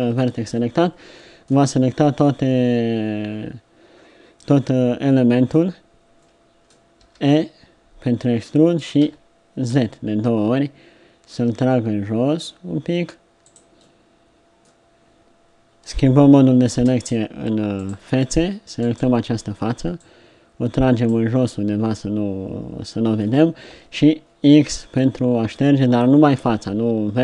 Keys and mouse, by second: 0.6 middle click, 4.4 middle click, 6.5-8.1 middle drag, 7.0 e, 16.8 ctrl+Tab, 21.4 middle click, 22.5 middle click, 23.2 middle click, 23.7 x.